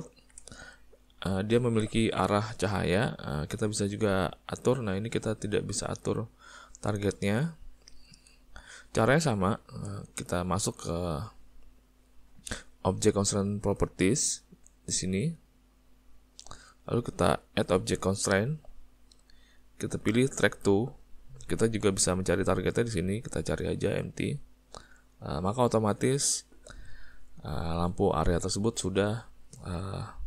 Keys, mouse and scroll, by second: 0.1 ctrl+middle click, 0.5 shift+middle click, 1.6 click, 4.4 click, 9.1 middle click, 9.5 shift+middle click, 15.8 click, 18.5 click, 22.9 click, 29.2 middle click.